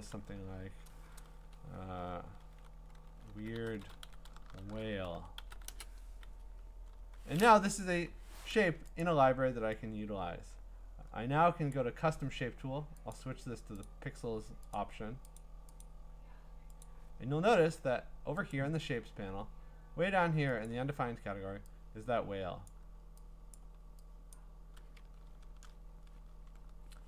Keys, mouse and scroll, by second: 3.1-6.0 typing, 7.9 Delete, 9.0 click, 11.7 click, 13.1 click, 13.9 click, 14.8 click, 15.8 click, 16.8 click, 19.1-20.0 scroll, 20.7 click, 22.7 click, 23.6 click, 24.3 click, 25.1-26.5 scroll down 14, 26.6 scroll up 4.